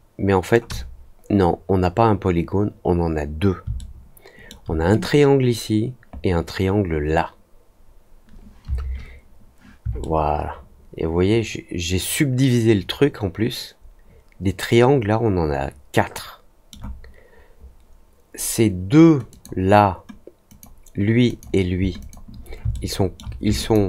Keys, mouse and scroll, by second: 3.7 alt+middle click, 9.9-16.6 alt+middle drag, 19.2 click, 20.4 click, 21.2 click, 21.9 shift+click, 22.7 alt+middle click, 23.5 ctrl+click.